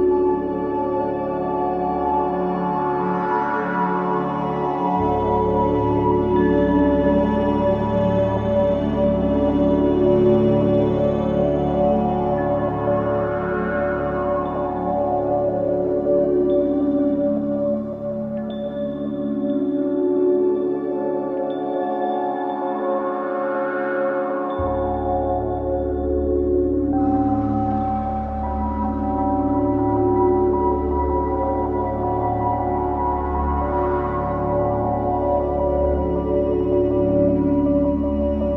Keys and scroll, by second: 0.4 1, 3.6 5, 4.0 4, 5.7 6, 6.0 5, 19.3 4, 20.6 3, 27.9 Escape, 30.5 Delete.